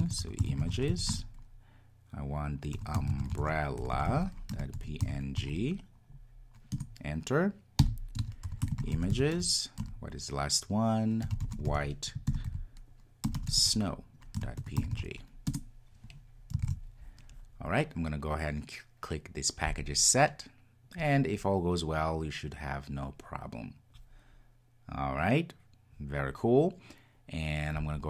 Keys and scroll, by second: 16.6 super+s.